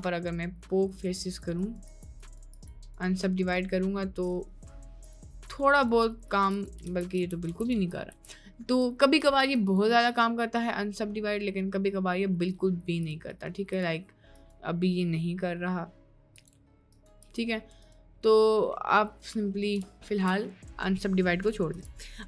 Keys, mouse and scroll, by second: 0.0-1.4 right drag, 1.6-2.7 right drag, 3.0 right click, 3.7-5.2 right drag, 5.6 right click, 6.4 right click, 7.0 ctrl+z, 7.3 ctrl+z, 7.4 ctrl+z, 7.7 ctrl+z, 8.1 ctrl+z, 9.3 ctrl+z, 9.7 click, 10.0-13.3 right drag, 13.4 right click, 14.6-16.5 right drag, 17.0 right click, 18.0 right click, 20.0 ctrl+z, 20.2 ctrl+z, 20.4 ctrl+z, 21.7 Tab.